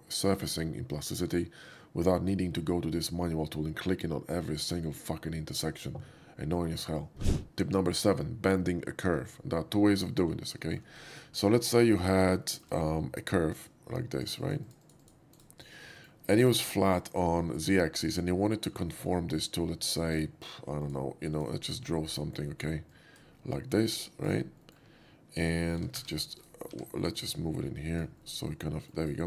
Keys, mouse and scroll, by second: 10.7 shift+middle click, 11.6 alt+middle click, 12.4 shift+middle drag, 13.6 shift+click, 14.2 shift+drag, 14.5 shift+click, 14.7 shift+drag, 14.9 shift+click, 15.1 shift+click, 15.4 shift+right click, 16.0 alt+middle click, 16.6 shift+middle click, 17.6 shift+middle drag, 17.9 scroll up 2, 18.9 shift+middle click, 20.1 shift+click, 20.9 shift+click, 21.4 shift+click, 22.1 middle drag, 23.0 click, 23.7 middle drag, 24.2 right click, 24.5 middle drag, 25.9 f, 26.1 g, 26.5 right click, 27.3-28.0 drag, 28.2-28.9 middle drag, 29.0 right click.